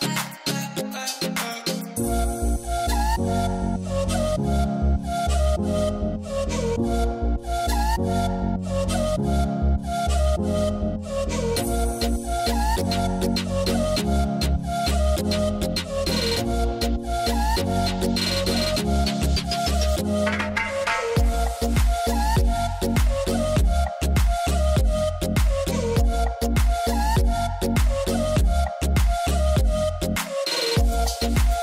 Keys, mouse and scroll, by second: 0.5 click, 7.5 click, 10.5-14.8 middle drag, 14.8-18.1 drag, 19.9-22.8 drag, 24.4-31.6 drag.